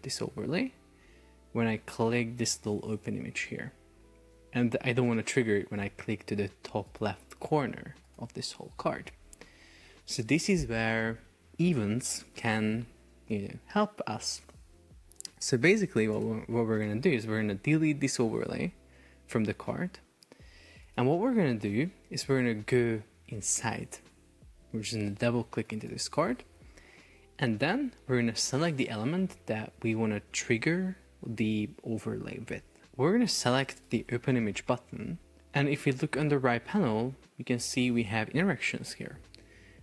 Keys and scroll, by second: 9.6 Escape, 19.1 BackSpace.